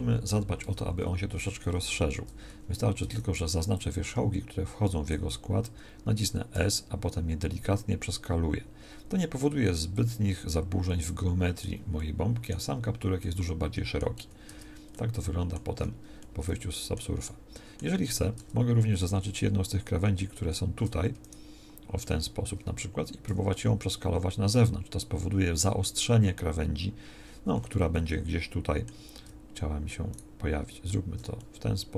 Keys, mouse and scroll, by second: 0.6 Tab, 2.5 a, 3.0 z, 3.4 b, 14.2 z, 14.4 Tab, 18.4 Tab, 18.8 a, 23.2 s.